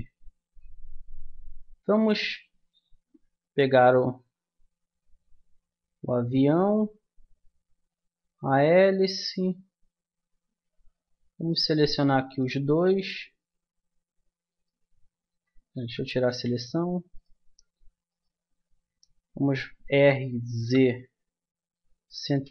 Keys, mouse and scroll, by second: 2.1-3.8 drag, 6.6-8.4 drag, 8.4-11.3 middle drag, 11.3-14.0 right drag, 14.5-16.1 right drag, 15.3 a, 15.7 a, 16.3 a, 19.9 r.